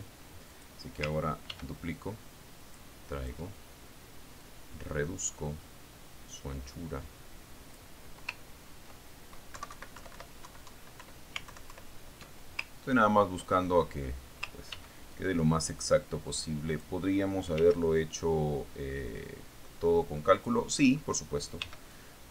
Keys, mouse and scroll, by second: 0.4 ctrl+middle click, 1.3 click, 2.0 click, 3.0 ctrl+d, 3.4-4.9 ctrl+drag, 5.9-9.6 drag, 9.9-10.9 ctrl+scroll up 2, 10.9-11.6 scroll up 1, 11.1 Right, 11.5 Left, 11.9 Right, 12.5 Left, 14.5-15.0 ctrl+scroll down 2, 15.0-16.6 ctrl+scroll up 5, 15.6 middle click, 16.2 ctrl+d, 16.6-18.5 ctrl+drag, 19.1 ctrl+d, 19.3-22.1 ctrl+drag.